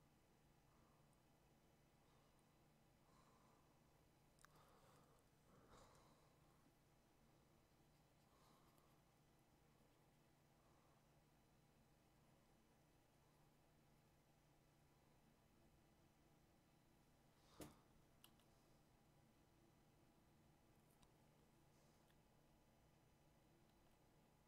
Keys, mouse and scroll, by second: 18.3 x, 21.9 x, 23.8 x.